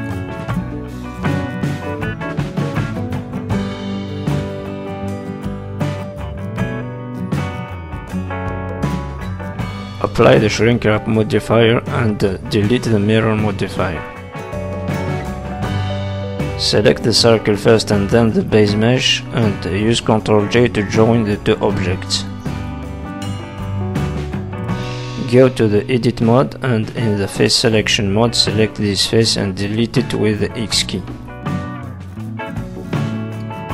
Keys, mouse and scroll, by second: 0.4 middle click, 1.2 z, 2.2 middle click, 5.4 z, 6.2 middle click, 7.9 click, 10.2 click, 10.8 middle click, 11.9 middle click, 13.2 middle click, 13.2 shift+click, 13.4 shift+click, 14.3 click, 15.2 z, 16.8 shift+click, 17.2-17.6 scroll down 3, 17.6 middle click, 18.1 shift+middle click, 18.4-18.8 scroll up 4, 19.5 ctrl+j, 20.3-20.7 scroll down 4, 20.7 middle click, 21.3-21.6 scroll up 3, 21.6 shift+middle click, 21.9 middle click, 23.7 z, 24.5-24.8 scroll up 2, 24.9 middle click, 25.6 Tab, 25.9 middle click, 26.6 click, 26.9 middle click, 28.5 click, 29.1 click, 30.3 click, 30.9 x, 31.8 middle click, 33.4 middle click.